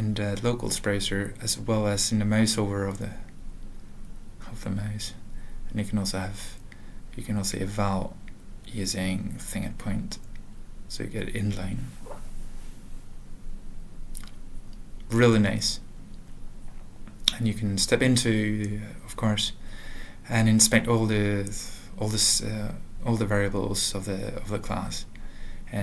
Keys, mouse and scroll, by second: 4.9 alt+f, 5.6 alt+f, 5.9 alt+b, 6.4 ctrl+space, 6.5 alt+f, 7.0 alt+x, 7.4-8.5 typing, 9.0 ctrl+n, 9.2 ctrl+n, 9.6 Return, 13.4 ctrl+a, 13.9 alt+f, 14.8 alt+f, 16.7 F7, 21.4 click, 22.4 ctrl+n, 22.4 ctrl+f, 22.5 ctrl+f, 22.7 ctrl+f, 23.0 Return, 23.9 ctrl+f, 24.6 click, 25.0 Return.